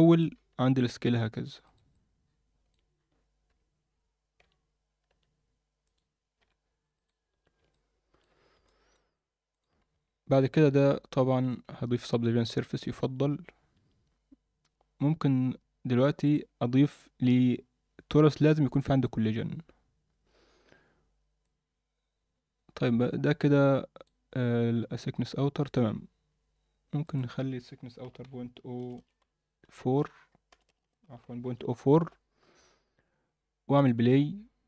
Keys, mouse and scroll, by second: 0.1 click, 0.5 s, 1.9-2.7 middle drag, 3.5 KP_7, 3.9-4.4 scroll up 2, 4.4 z, 5.1 s, 6.4 i, 7.3 z, 7.7-8.2 alt+middle drag, 8.3-8.6 scroll down 2, 8.6 alt+middle click, 9.5 click, 11.4 ctrl+2, 13.0 Tab, 13.7 Tab, 16.2 click, 18.7 click, 19.3-21.4 scroll down 1, 21.4-24.1 drag, 21.4 scroll down 1, 27.0-32.1 drag, 28.9 BackSpace, 30.6 BackSpace, 33.7 click.